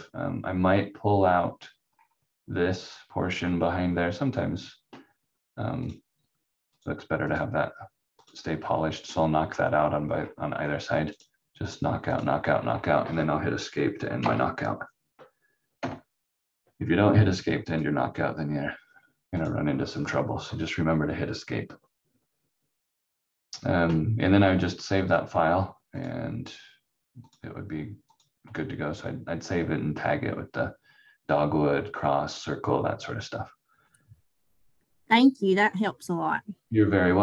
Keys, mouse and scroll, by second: 1.9 scroll up 1, 5.8 click, 9.2 scroll down 1, 10.1 scroll up 1, 11.6 click, 12.5 scroll down 1, 14.2 Escape, 15.7 F4, 17.6 click, 25.9 click.